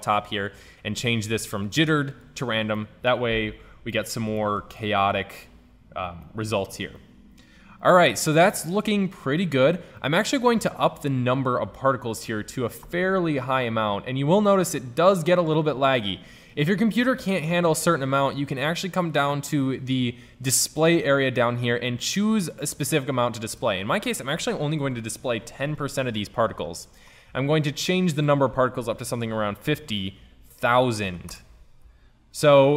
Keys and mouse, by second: 1.0-2.4 middle drag, 5.0 middle click, 5.2-6.4 middle drag, 6.5 middle click, 10.7-12.1 drag, 12.6-14.0 middle drag, 14.9 middle click, 16.6 middle click, 18.1 click, 20.9-22.7 drag, 23.7-25.5 drag, 28.2-30.1 middle drag, 30.1 KP_0.